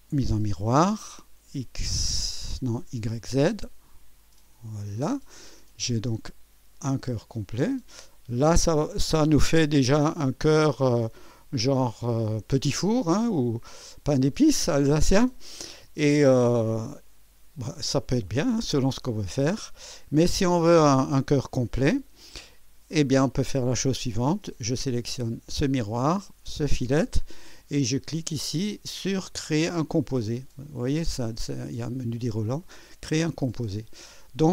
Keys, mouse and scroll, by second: 0.4 click, 3.9 click, 5.1 click, 5.6-7.3 drag, 7.4-9.2 drag, 9.3 click, 10.0-21.0 drag, 21.1-22.1 drag, 23.0 click, 25.0 click, 26.4 ctrl+click, 30.6 click, 33.1 click.